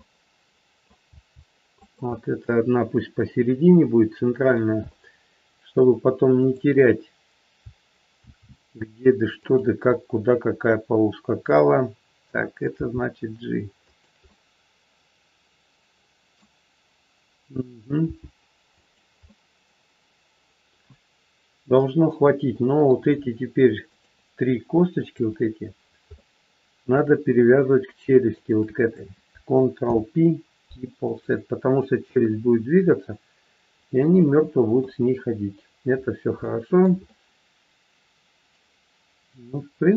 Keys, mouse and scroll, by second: 0.0 middle click, 1.0 g, 2.0 middle click, 2.0 scroll up 1, 4.9 middle click, 6.4 click, 8.3 shift+d, 9.9 middle click, 12.6 g, 14.3 middle click, 18.0 g, 19.3 middle click, 22.1 middle click, 23.9 shift+click, 25.3 shift+click, 25.6-26.1 scroll down 2, 26.1 middle click, 27.5 scroll up 2, 28.4 shift+click, 29.8 ctrl+p, 33.4-34.0 scroll down 2, 34.1 shift+middle click, 34.9 scroll down 1, 35.5-36.4 scroll down 2, 36.4 shift+middle click, 37.0 middle click.